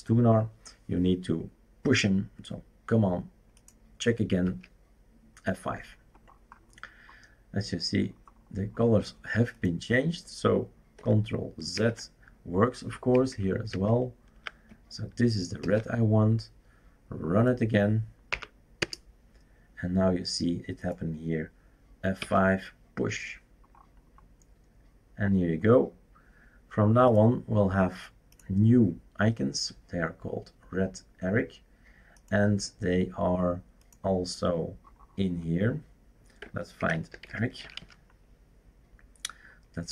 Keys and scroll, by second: 4.4 F5, 11.7 ctrl+z, 13.1 ctrl+z, 13.7 ctrl+z, 15.6 ctrl+s, 18.3 Up, 18.8 Return, 22.2 F5, 36.8-38.3 typing.